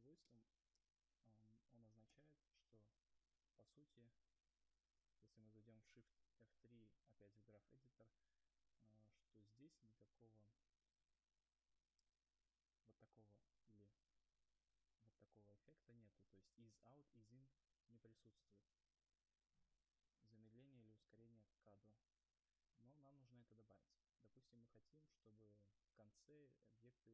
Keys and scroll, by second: 0.9 0, 9.6 shift+F3, 17.2 ctrl+z.